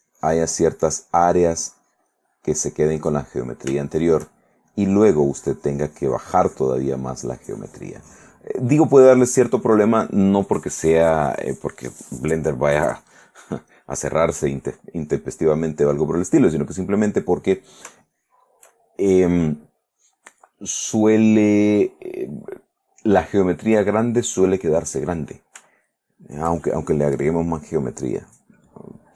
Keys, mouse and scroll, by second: 0.4 ctrl+click, 1.0-2.8 drag, 2.8 middle click, 3.9 shift+middle click, 5.2-6.9 drag, 7.4-8.6 drag, 8.7 click, 10.2 click, 18.1-19.7 shift+middle drag, 25.9 shift+middle click, 28.2 click, 28.8 click.